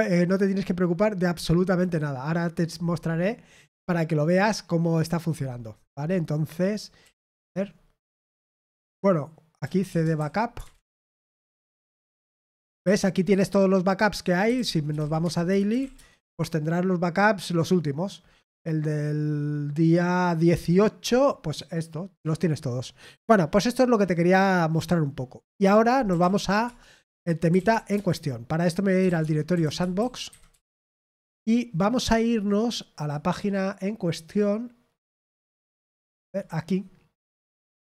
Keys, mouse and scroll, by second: 3.7-4.1 scroll down 1, 6.7-7.5 typing, 9.3-12.0 typing, 14.1-16.1 typing, 25.8-31.1 typing, 32.9 click, 36.2 click.